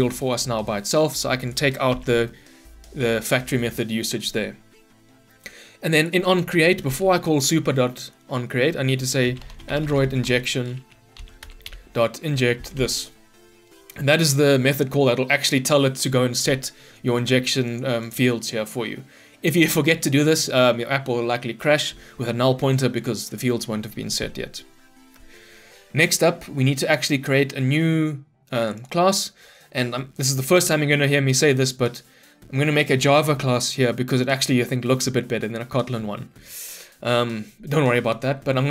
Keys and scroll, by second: 1.9 ctrl+y, 11.5 Return.